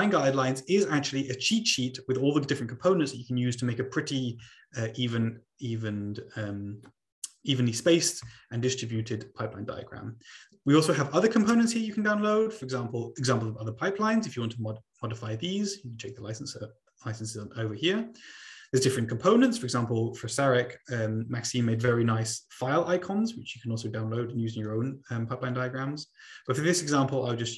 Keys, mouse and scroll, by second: 10.0-11.1 scroll up 2, 11.1-12.5 scroll up 1, 12.5-14.2 scroll up 1, 17.9-20.2 scroll down 4, 24.3-25.1 scroll down 2.